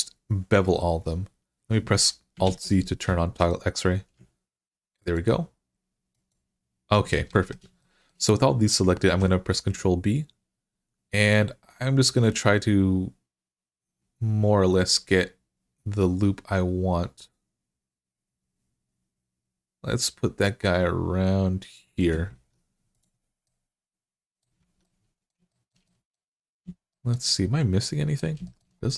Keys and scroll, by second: 2.3 alt+z, 7.1 alt+z, 8.9 ctrl+b, 22.2 Tab, 24.4 Tab.